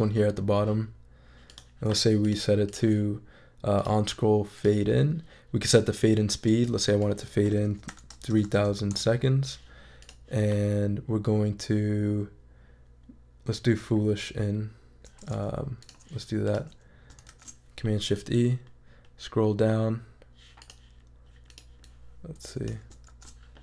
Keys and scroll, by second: 7.9 3, 8.3 0, 8.9 Return, 17.3 shift+super+e, 23.1 shift+super+e.